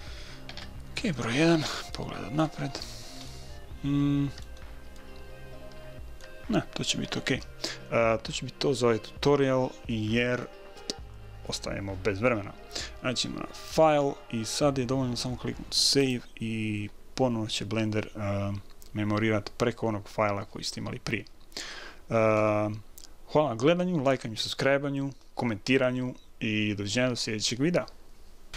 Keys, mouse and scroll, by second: 0.9 KP_1, 1.6-4.0 middle drag, 14.1-16.0 drag.